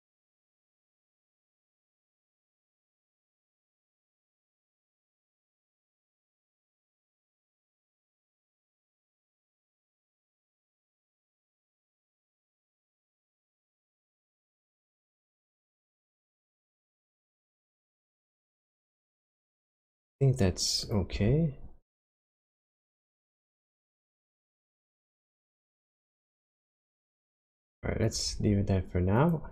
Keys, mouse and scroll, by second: 0.5 click, 1.6 click, 1.9 g, 2.8-3.4 scroll down 4, 3.4-4.6 scroll up 9, 5.2 click, 6.3 click, 6.6 g, 7.4 click, 9.5 click, 9.9 g, 11.7 click, 12.1 click, 12.4 g, 13.2 click, 13.6 click, 13.9 g, 15.6 click, 16.5-17.1 scroll down 4, 17.1-18.5 scroll up 4, 20.8 click, 21.2 g, 23.0 click, 23.8 click, 24.2 g, 26.0 click, 28.0 click, 28.4 g, 29.2 click.